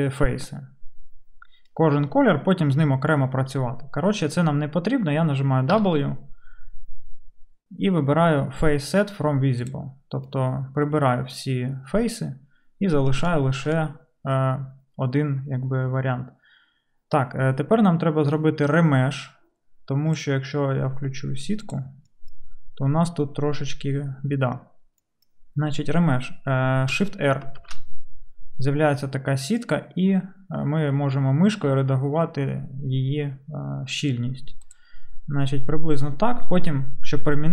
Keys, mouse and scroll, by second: 5.8 w, 27.1 shift+middle click, 27.6 shift+r, 29.0-37.5 middle drag.